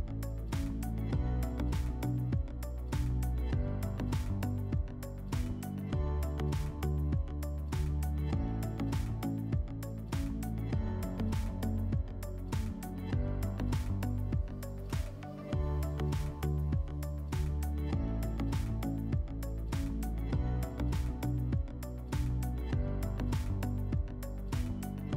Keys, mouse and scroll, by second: 1.6 click, 2.8 click, 6.3 click, 7.4 click, 11.1 click, 12.8 click, 15.9 click, 16.6 click, 21.0 click.